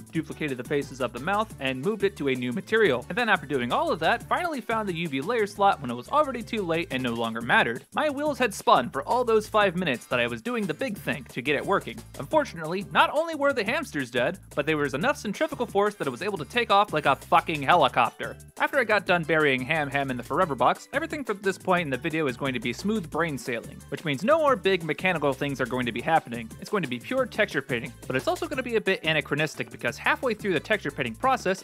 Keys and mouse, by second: 0.7 h, 1.0 right click, 3.1 ctrl+z, 3.1 click, 5.9 right click, 6.2 shift+space, 6.4 right click, 6.9 right click, 7.2 alt+g, 9.1 alt+g, 11.9 shift+space, 12.2 right click, 14.5 right click, 15.0 shift+g, 15.9 right click, 16.2 g, 21.1 alt+g, 24.8 shift+space, 25.1 right click, 27.1 click, 31.0 right click.